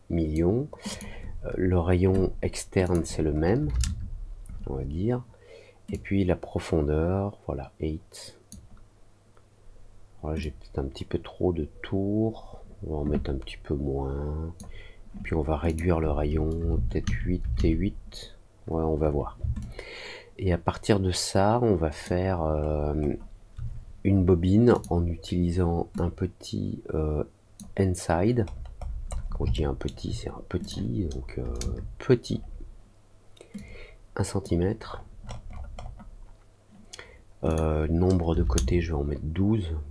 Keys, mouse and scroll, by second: 0.8 click, 2.8 click, 5.8-8.4 drag, 10.3-14.5 drag, 15.6 click, 19.5-22.0 alt+drag, 22.5 alt+middle click, 22.9 alt+middle click, 24.7 click, 25.9-27.5 drag, 28.4-29.2 scroll down 3, 29.5 alt+middle click, 30.5 click, 33.5 click, 34.8 scroll up 1, 35.1 middle click, 37.4 click.